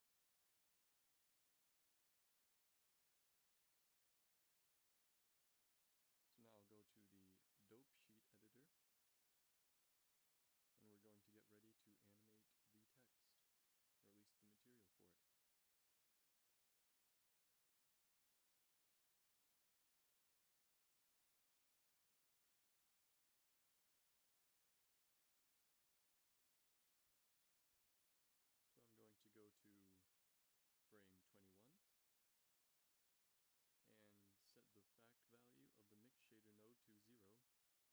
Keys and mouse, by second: 0.2 ctrl+s, 5.5-13.6 drag, 22.9 click, 24.8 middle click, 27.3-29.4 middle drag, 31.7-36.1 drag, 36.3-37.9 drag.